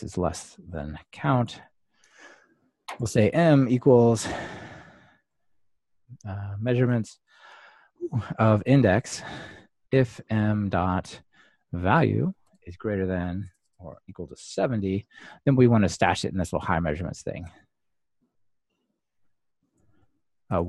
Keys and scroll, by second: 6.8 Return, 12.1 Return, 16.8 Return.